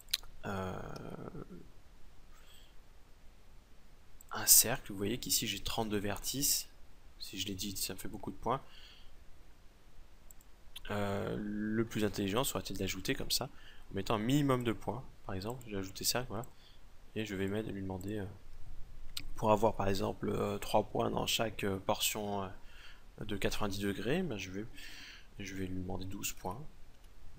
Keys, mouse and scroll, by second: 0.5 shift+a, 6.7 Tab, 8.0 Tab, 11.4 x, 12.6 shift+a, 19.1 right click.